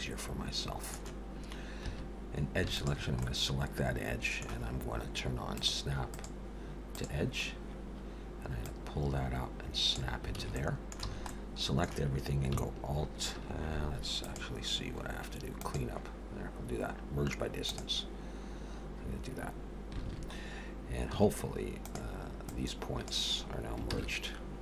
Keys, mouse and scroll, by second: 1.8 2, 2.7 alt+shift+click, 3.2 middle click, 5.4 click, 6.1 click, 8.7 click, 10.3 alt+a, 10.5 middle click, 11.0 a, 11.3 middle click, 14.2 click, 20.0 alt+a, 21.1 1, 21.8 click, 22.5 click, 23.9 ctrl+z.